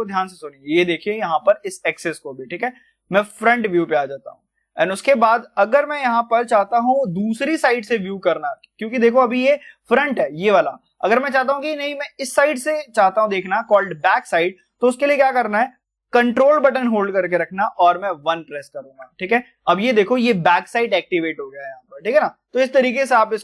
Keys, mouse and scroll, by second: 8.5 scroll up 1, 8.5-14.3 middle drag.